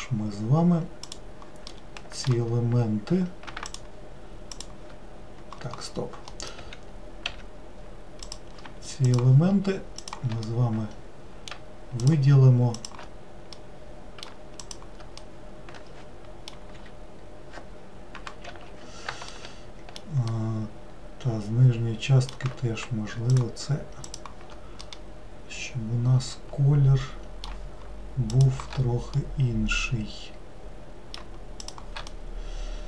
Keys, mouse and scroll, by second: 1.1 click, 1.7-3.7 middle drag, 3.7-6.3 shift+drag, 6.3 middle click, 6.6 w, 7.3 w, 8.3 click, 9.1 shift+click, 10.0 shift+click, 10.5-12.0 middle drag, 12.0 shift+click, 12.8 shift+click, 13.6-14.6 middle drag, 14.6 shift+click, 15.2-16.8 middle drag, 16.8 l, 18.5 ctrl+z, 19.3 alt+middle click, 20.4-23.4 middle drag, 23.4 shift+click, 24.1 shift+click, 24.8-27.9 middle drag, 28.3 shift+click, 29.2-31.6 middle drag, 31.6 shift+click, 32.1-32.8 middle drag.